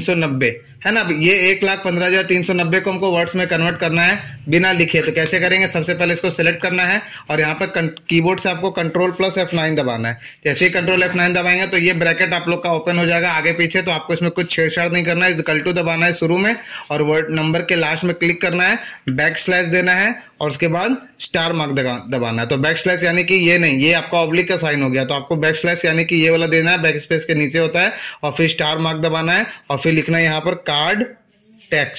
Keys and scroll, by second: 0.0-0.3 typing, 2.3 Return, 4.2 Return, 9.8 ctrl+F9, 15.7 =, 21.7 \, 22.6 BackSpace, 23.3 /, 24.9 BackSpace, 26.2 \, 29.2-31.9 typing.